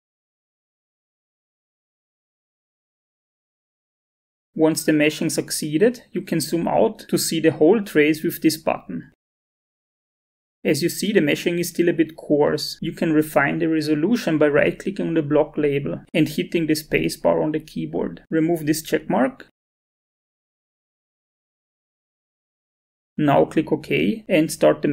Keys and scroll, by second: 0.0-1.5 typing, 16.0 space, 21.1-22.3 typing.